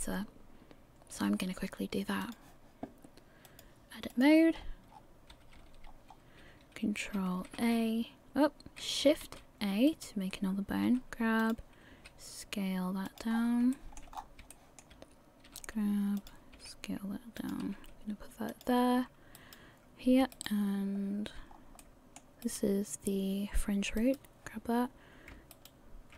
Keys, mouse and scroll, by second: 2.2 click, 3.4 click, 4.5-4.9 scroll up 2, 4.9-5.6 scroll down 5, 5.3 a, 5.8-6.6 scroll down 2, 7.4 ctrl+a, 9.2 shift+a, 10.1 right click, 10.8 g, 11.9 s, 13.3 scroll up 8, 13.7 shift+middle click, 14.1 scroll up 2, 14.5 shift+middle click, 15.5 g, 16.5 s, 17.6 g, 19.6 right click, 20.5 ctrl+right click, 21.5 scroll down 2, 21.8 middle click, 22.6 right click, 24.2 right click, 25.7 ctrl+right click.